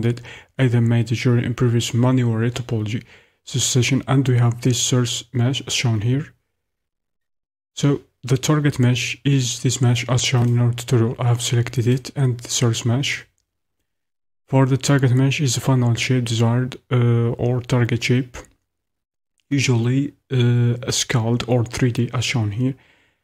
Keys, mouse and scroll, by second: 11.9 click, 13.2 click.